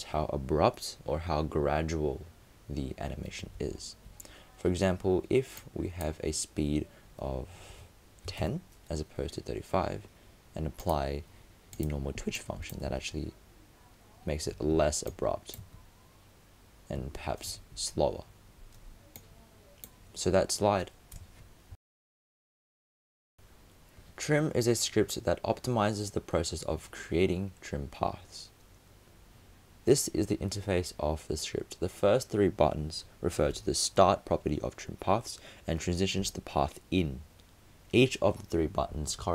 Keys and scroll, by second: 3.6 super+z.